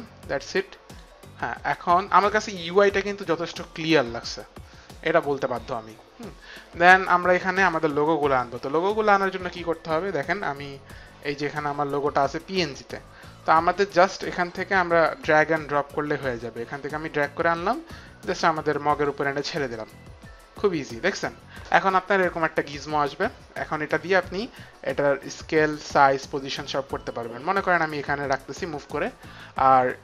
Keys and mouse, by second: 0.9 click, 6.9 click, 10.3 click, 10.9 click, 13.6 click, 16.3 click, 24.4 click.